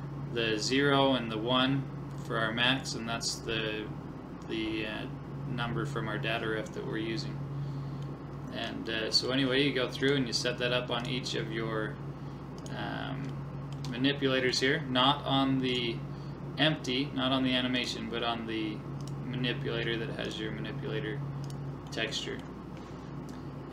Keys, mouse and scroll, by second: 8.1-10.9 middle drag, 10.0-14.4 right drag, 13.3-15.9 middle drag, 15.8-17.6 right drag, 17.8-23.2 right drag, 21.9-23.7 middle drag.